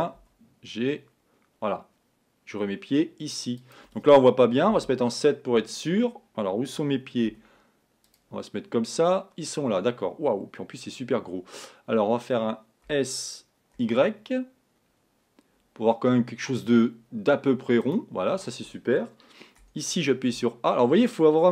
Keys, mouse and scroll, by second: 0.4 g, 4.9 KP_7, 7.3 z, 13.2 s, 19.7 a, 20.4 l.